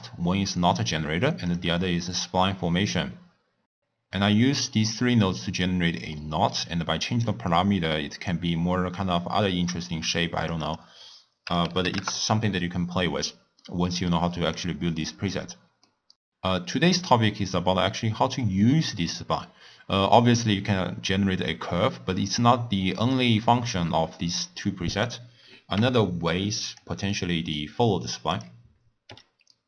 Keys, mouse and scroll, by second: 1.5 click, 6.0-7.2 middle drag, 7.2-10.2 drag, 10.5-13.5 drag, 13.5-14.5 middle drag, 14.5-15.8 drag, 15.8 middle click, 23.1 middle click, 23.6-24.0 scroll down 1, 24.0-25.0 middle drag, 25.0 click, 25.7 g, 27.0-28.3 middle drag, 28.3 click, 29.0 e.